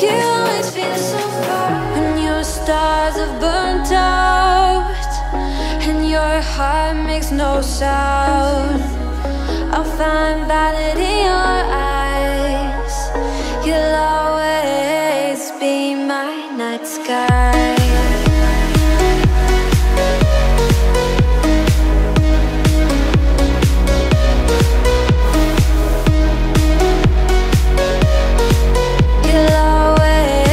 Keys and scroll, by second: 13.4 Left, 16.9 Left, 26.1 Right.